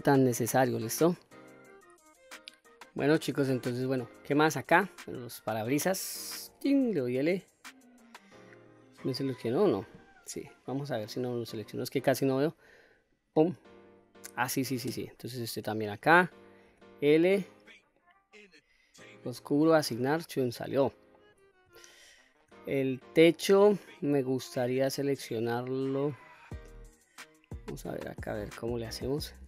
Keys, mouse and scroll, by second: 0.4 middle click, 3.7-4.1 scroll up 1, 4.1-4.6 middle drag, 5.1 click, 6.4 l, 7.2-9.4 middle drag, 9.4 scroll down 1, 10.3-11.0 middle drag, 12.1 click, 13.1 click, 13.8 click, 15.5 click, 16.6 l, 17.9-19.1 middle drag, 19.1 click, 19.7 click, 20.3-20.7 scroll down 1, 20.7 middle click, 21.8 shift+scroll down 1, 21.9 shift+middle click, 24.5-24.9 scroll up 2, 24.9-28.3 middle drag, 28.9 shift+middle click.